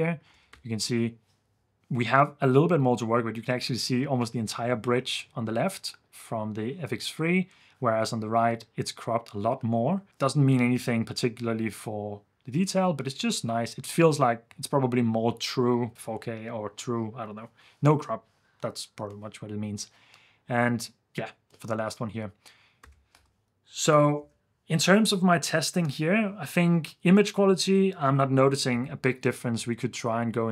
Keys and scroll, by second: 0.3 super+f, 23.1 ⟲, 24.4 super+s.